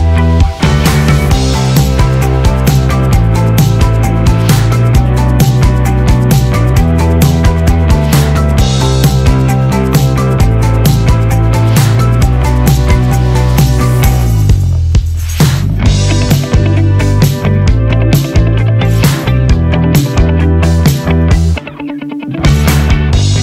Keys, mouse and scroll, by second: 4.7-7.2 typing, 9.2 click, 10.6 Return, 13.6-14.3 typing, 13.6 click, 18.3 p, 19.3-19.7 scroll down 1, 19.8-21.1 scroll, 21.1 click.